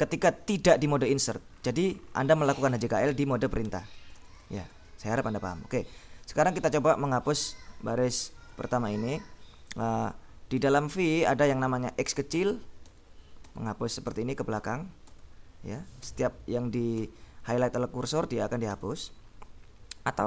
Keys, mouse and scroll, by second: 4.0 l, 5.7 k, 8.4 Escape, 12.4 x, 13.5 x, 14.1 x, 15.1 x, 16.1 x, 16.9 x, 18.8 x.